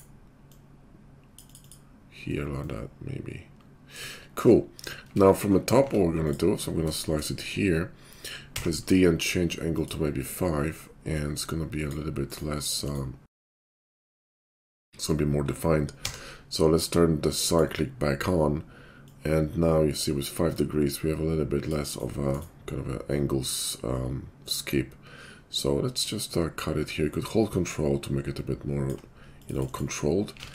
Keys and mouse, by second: 5.1 Tab, 5.7 Tab, 6.3-11.1 middle drag, 8.5 d, 11.1-30.4 drag, 14.0 d, 16.0 d, 30.4 alt+x.